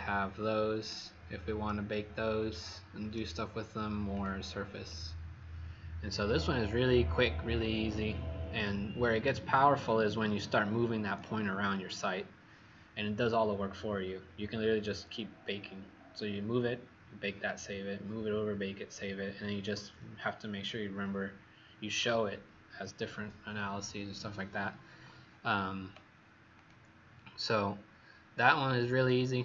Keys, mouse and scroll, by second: 0.7 click, 1.6 right click, 4.1 click, 8.2-9.6 scroll down 1, 9.6-10.4 scroll down 1, 10.4-11.3 scroll up 1, 26.5 click, 27.3-29.0 scroll down 4, 29.0 click.